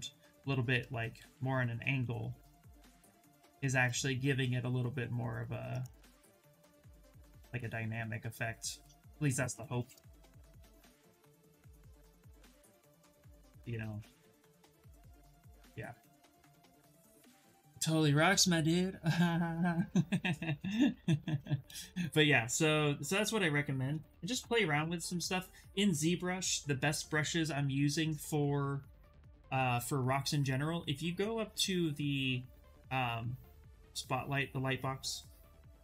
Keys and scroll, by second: 0.9 w, 6.3 ctrl+z, 6.7 ctrl+z, 10.7 w, 15.1 q, 23.5-24.5 typing, 26.0 ,.